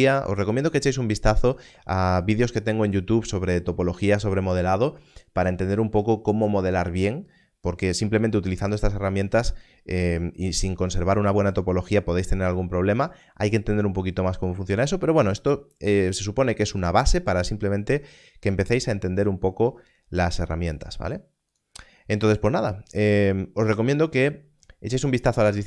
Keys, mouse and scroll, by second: 21.5 click.